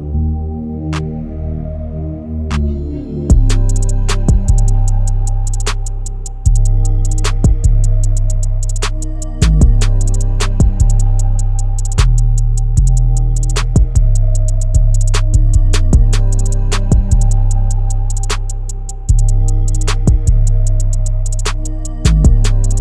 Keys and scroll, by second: 18.2-19.8 space.